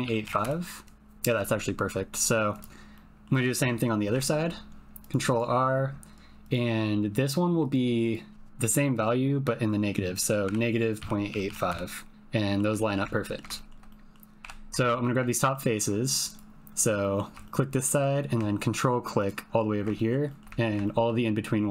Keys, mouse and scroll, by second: 2.6 click, 3.0 click, 4.0 ctrl+r, 6.4-7.6 drag, 8.0-11.9 drag, 12.4 middle click, 12.7 shift+middle click, 13.2 ctrl+middle click, 13.6 shift+middle click, 14.0 middle click, 14.4 3, 14.8 shift+middle click, 15.2 ctrl+middle click, 17.0 click, 17.4 shift+middle click, 17.5 shift+click, 17.8 shift+click, 19.9 shift+click, 20.1 shift+middle click, 20.2 shift+middle click, 20.3 shift+click, 20.5 ctrl+click, 20.6 ctrl+middle click, 20.7 typing, 20.8 shift+middle click.